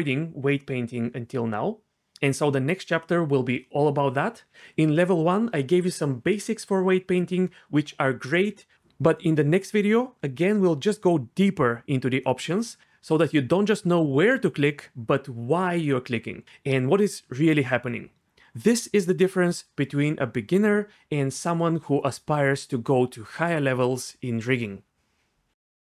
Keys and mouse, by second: 2.4 z, 2.8 r, 3.3 alt+r, 4.4 z, 4.7 r, 4.9 r, 9.2 ctrl+z, 9.5 ctrl+z, 10.6 Tab, 15.5 Tab, 17.2 Tab, 18.4 a, 20.4-23.5 drag.